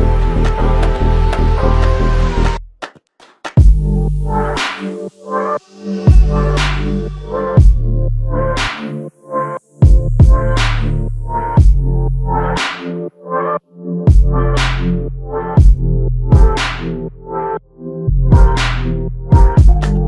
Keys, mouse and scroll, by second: 1.1 double click, 10.5 alt+click, 13.1 double click, 17.0 alt+click, 19.4 double click.